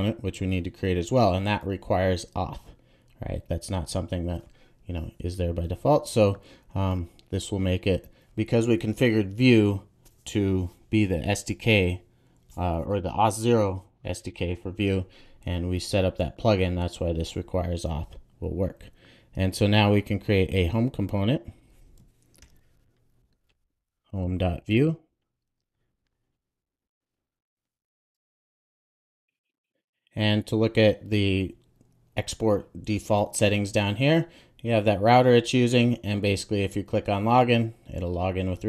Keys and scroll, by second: 22.4 super+n, 28.4 super+j, 28.7 Return.